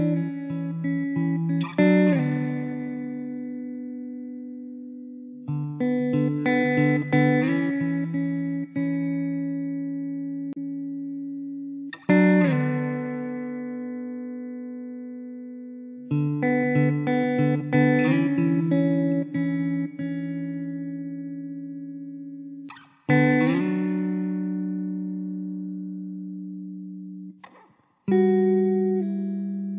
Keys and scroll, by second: 0.6 i, 4.9 s, 8.1 e, 9.4 `, 10.3 alt+z, 11.5 alt+z, 11.9 Tab, 13.8 `, 16.0 ctrl+s, 16.6 KP_0, 21.3 Tab, 22.6 ctrl+r, 25.1 ctrl+b, 29.2 Tab.